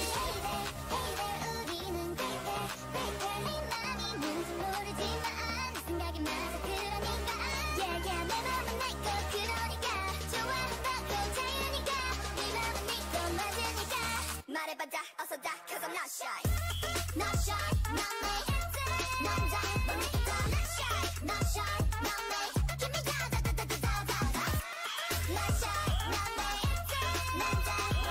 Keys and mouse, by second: 7.1 a, 8.4-11.2 right drag, 11.2 a, 14.2 k, 17.6-20.3 drag, 20.4 k, 23.6 ctrl+Tab, 24.8 click, 25.4 x, 26.2 a, 26.5 click, 27.6 ctrl+Tab.